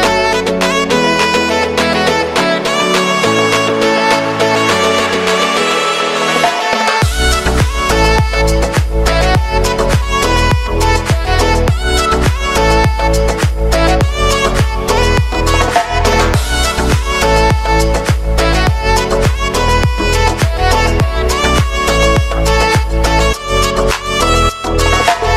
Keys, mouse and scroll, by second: 2.5 space, 3.1 click, 3.6 s, 4.4 click, 5.4 k, 6.5 click, 8.2 Return, 9.2 click, 9.9 space, 15.8 space, 18.8-20.6 drag, 20.6-21.8 typing.